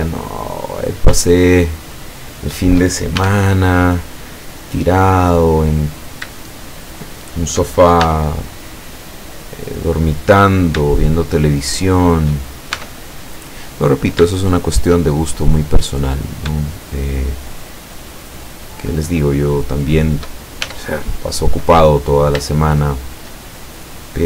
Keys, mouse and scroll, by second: 0.8 right click, 1.4 shift+right click, 1.9 shift+right click, 2.3 shift+right click, 3.2 shift+e, 4.2 click, 6.0 right click, 6.4 shift+right click, 6.9 shift+right click, 7.3 shift+right click, 8.1 shift+e, 9.0 click, 10.6 shift+right click, 11.0 shift+right click, 11.6 shift+right click, 12.0 shift+right click, 12.8 shift+e, 13.6 click, 14.4 shift+click, 15.5 scroll up 2, 16.2 right click, 16.8 shift+right click, 17.1 shift+right click, 17.5 shift+right click, 18.0 shift+right click, 18.4 shift+right click, 18.7 shift+right click, 19.0 shift+right click, 19.6 shift+right click, 19.9 shift+right click, 20.7 shift+e, 22.1 shift+click, 22.6-23.4 shift+middle drag, 23.9 right click.